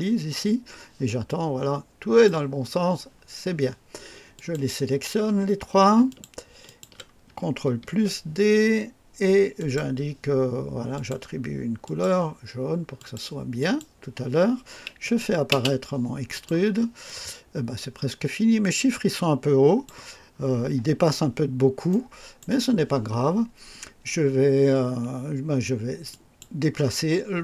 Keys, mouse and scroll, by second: 1.2-2.3 drag, 2.4 scroll down 1, 3.0 scroll down 1, 4.2 click, 6.0 ctrl+click, 6.5 ctrl+click, 7.7 d, 9.5 click, 10.9 click, 11.7 click, 12.9 click, 13.5 click, 14.9 click, 15.4 space, 16.2 click, 16.9-20.0 drag, 20.2 scroll up 1, 21.8-22.5 right drag, 26.0 click.